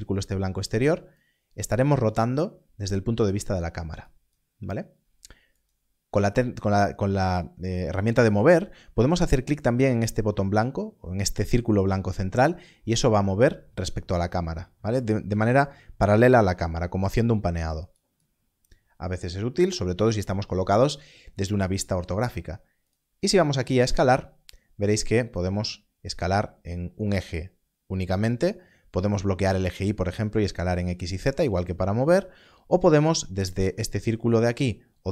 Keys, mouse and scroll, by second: 1.1 click, 3.9 right click, 12.4 click, 17.8 right click, 22.8 click, 25.3 click, 27.1 right click, 31.0 right click.